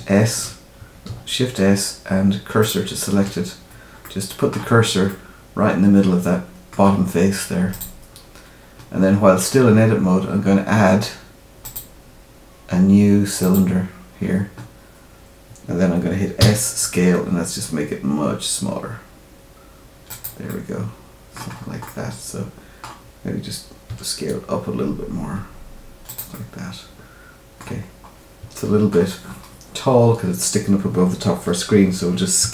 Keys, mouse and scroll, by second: 1.0 shift+s, 4.0 middle click, 5.0 middle click, 7.7 click, 11.6 click, 16.3 s, 20.4 middle click, 21.5-22.0 scroll up 3, 21.8 middle click, 23.8 s, 26.3 middle click, 27.8 scroll up 1, 28.5 shift+middle click, 32.4 s.